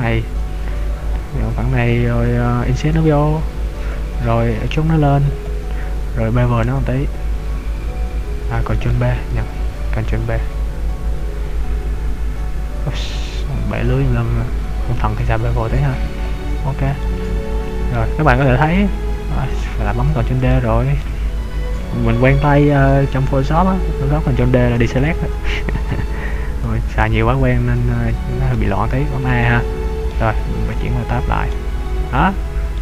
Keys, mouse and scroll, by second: 0.7 scroll up 1, 3.0 i, 4.0 click, 4.7 e, 5.6 click, 6.8 b, 8.9 right click, 9.3 ctrl+b, 16.4 click, 17.0 middle click, 18.5 ctrl+d, 18.8-19.4 scroll up 2, 20.5 shift+middle click, 28.7 a, 29.5 middle click, 30.9 Tab, 31.5 middle click.